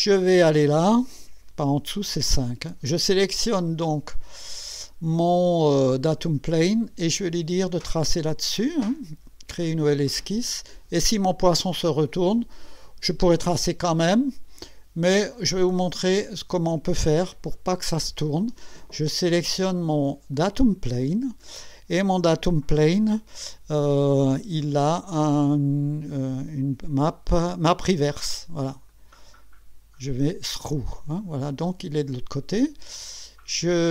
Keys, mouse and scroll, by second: 2.0 5, 3.7 scroll down 2, 6.2 click, 9.9 click, 15.9 click, 17.5-18.6 drag, 20.3 click, 21.1 scroll down 1, 28.9 click, 29.4 click, 30.2 click, 31.2 click, 33.8 scroll down 1.